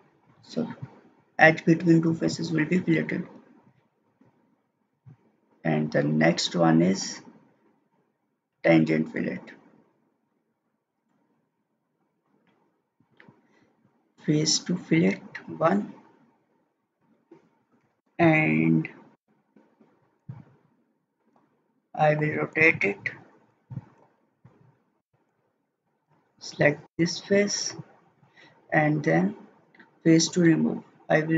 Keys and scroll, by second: 3.6 ctrl+z.